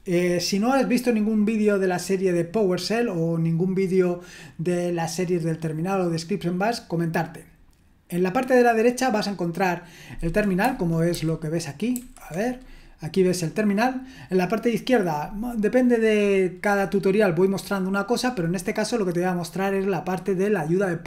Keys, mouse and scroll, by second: 11.1 super+h, 11.9 super+h.